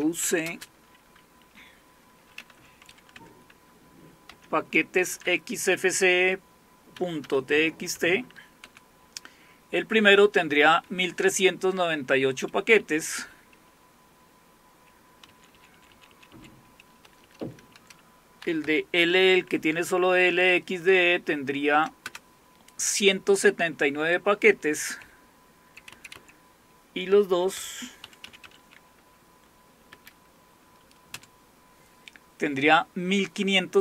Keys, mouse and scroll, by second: 0.0-0.5 typing, 2.1-3.1 typing, 3.2 Tab, 4.3-5.1 typing, 7.0 typing, 8.6 Return, 12.8 Up, 13.7 Left, 14.2 Left, 14.2-14.6 Left, 15.3 Right, 15.6 Right, 15.8 Right, 15.9 Right, 17.1 Delete, 17.3 Delete, 17.5 Delete, 17.7 Delete, 18.2-19.1 typing, 19.8 Tab, 20.9 Delete, 21.5 Delete, 21.5-21.9 Delete, 22.1 Return, 24.5 Up, 25.0 Left, 25.5 Left, 25.6 Left, 25.6 Left, 26.4 Left, 27.4-29.9 typing, 31.2 Return.